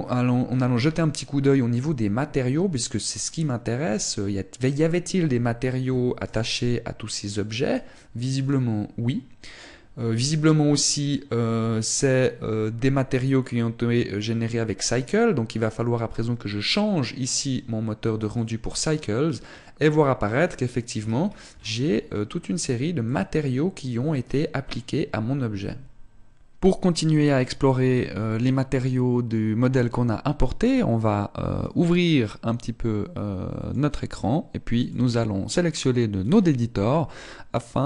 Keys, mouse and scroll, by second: 32.1 click, 35.3 click, 37.7-37.8 scroll up 1.